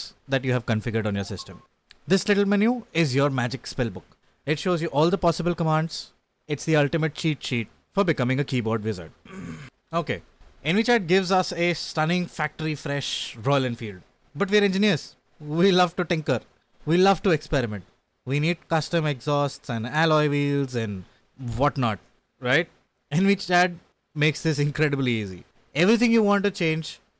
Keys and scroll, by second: 26.5 Return, 26.5 y.